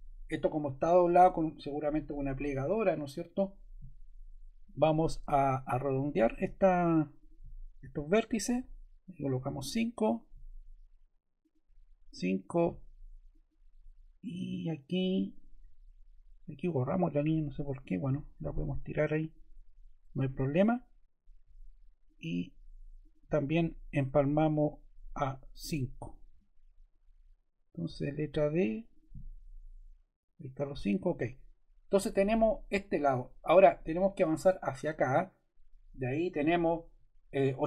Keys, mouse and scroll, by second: 12.3 click, 16.8-17.7 scroll, 17.7 click, 19.1 click, 25.5 5, 26.2 Return, 27.9 d, 31.1 ctrl+z.